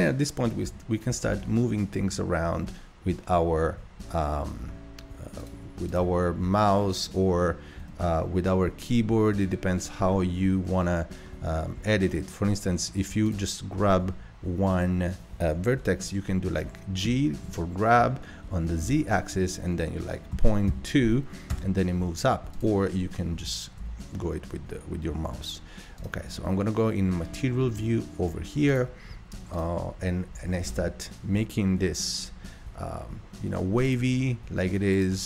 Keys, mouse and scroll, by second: 0.7 g, 5.9 click, 7.8 b, 11.3-12.3 middle drag, 12.3-13.1 scroll up 1, 13.1 scroll up 1, 13.3 click, 17.0 g, 22.5 click, 23.4 g, 23.5 g, 27.2-28.4 scroll down 8, 28.4 scroll down 1, 28.8 click, 29.5 click, 30.3 g, 34.9 click.